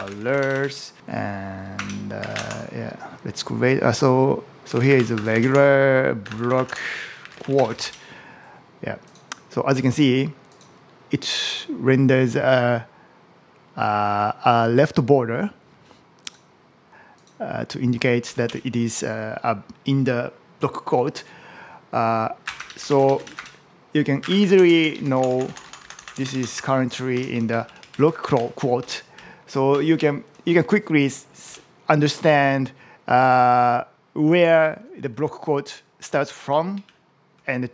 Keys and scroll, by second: 0.0-0.6 typing, 28.5 Up, 29.0 Down, 29.6 Up, 31.3 Right, 34.8 Down, 36.3 Up, 36.7 shift+Down.